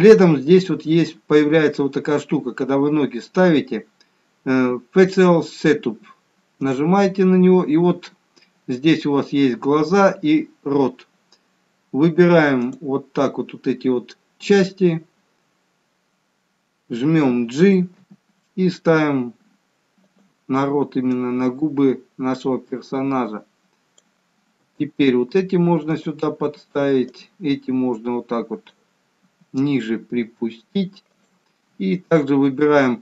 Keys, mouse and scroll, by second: 6.7 click, 12.8 click, 18.1 g, 21.4 click, 24.8 g, 27.2 click, 29.4 g, 32.3 click.